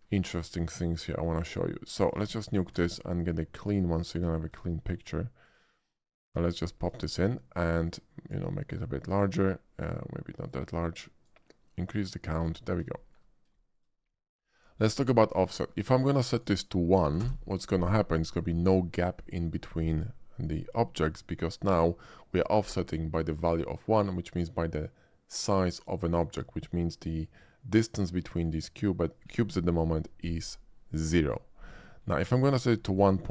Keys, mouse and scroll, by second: 1.3 click, 2.0 click, 2.3 x, 2.4 click, 2.8 shift+a, 3.6 click, 4.3 middle drag, 4.6 shift+middle click, 5.4 shift+click, 6.4 shift+click, 7.0 shift+middle click, 7.8 shift+click, 8.9 shift+middle click, 10.4-11.3 shift+drag, 11.9-12.4 drag, 13.0 shift+middle click, 13.5 shift+middle drag, 16.2 shift+click, 17.1 Return, 17.2 1, 32.3 typing, 32.6 click.